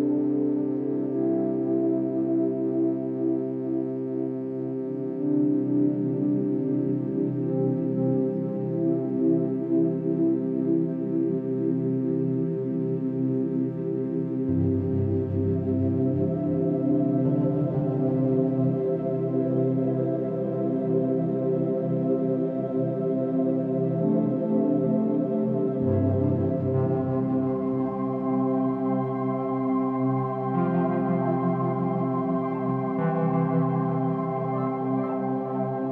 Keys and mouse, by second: 1.1 alt+shift+click, 1.8 ctrl+alt+drag, 2.4 ctrl+alt+shift+drag, 2.9-5.7 ctrl+alt+shift+drag, 6.3-7.2 drag, 7.2 middle click, 7.3-9.0 drag, 9.0 middle click, 9.2-9.9 drag, 9.9 typing, 10.4 shift+click, 12.3-12.7 typing, 14.1-15.1 drag, 16.0-16.7 drag, 17.3-17.8 shift+drag, 18.5-19.5 alt+shift+drag, 19.8-20.6 alt+drag, 20.8 shift+click, 21.2-21.9 shift+drag, 22.0 shift+click, 22.6 typing, 24.7-25.5 typing, 25.5-26.4 ctrl+shift+drag, 26.8 r, 27.1 x, 27.2 x, 28.2-29.9 drag, 30.3 ctrl+alt+click, 31.6 alt+click, 32.2 alt+click, 33.4-34.2 drag, 34.4 r, 34.6 x, 34.7 x.